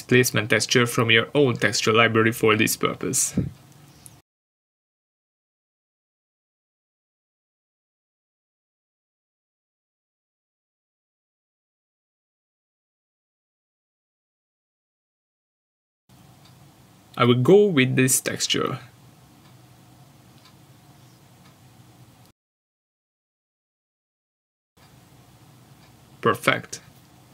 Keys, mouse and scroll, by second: 10.9 Return, 14.3 click, 21.4 click, 26.8 middle click.